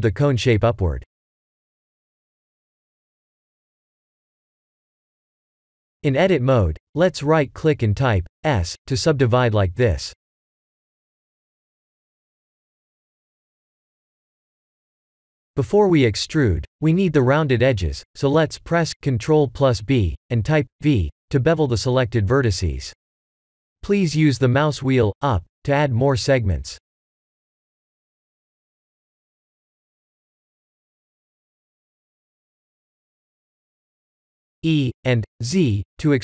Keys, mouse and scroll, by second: 0.3 middle click, 1.3-2.1 middle click, 1.8 middle click, 2.0 middle click, 2.3 middle click, 2.5 middle click, 2.9 middle click, 4.0 click, 5.8 Tab, 9.4 right click, 12.9 right click, 14.3 click, 15.0 shift+click, 19.0 ctrl+b, 26.9 Tab, 27.4 middle click, 29.4-29.8 scroll up 5, 30.1 middle click, 30.9 middle click, 31.5 Tab, 32.2 a, 32.8 e.